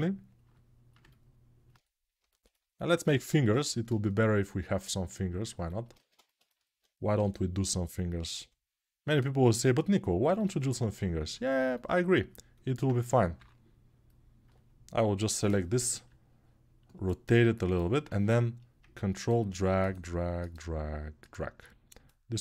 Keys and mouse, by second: 3.4 ctrl+Tab, 3.7 shift+a, 5.7 Tab, 10.0-22.4 alt+middle drag.